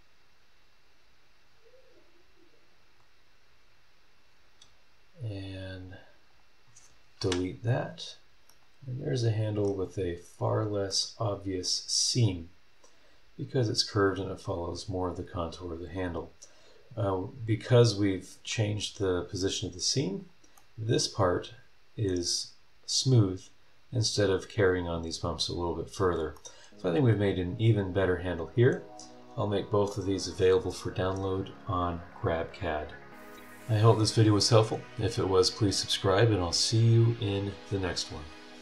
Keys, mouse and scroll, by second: 2.6-2.9 scroll down 2, 2.9 scroll up 2, 4.3-4.8 scroll down 2, 5.3 click, 5.7 scroll down 2, 6.3 click, 7.2 Delete, 8.5-9.8 middle drag, 8.6 right click, 9.8 scroll down 2, 10.3-10.9 scroll up 4, 10.9-18.3 middle drag, 11.0-18.3 right drag, 20.2 click, 20.5-22.2 middle drag, 20.7-22.2 right drag, 25.2 scroll down 1, 25.8 scroll up 1, 26.3-28.9 middle drag, 26.5-28.9 right drag, 29.1 scroll up 1, 29.9 click.